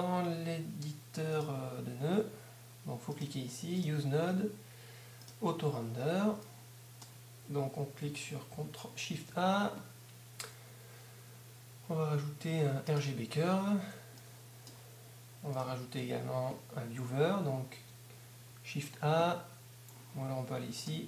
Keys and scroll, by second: 9.1 shift+a, 15.8 shift+a.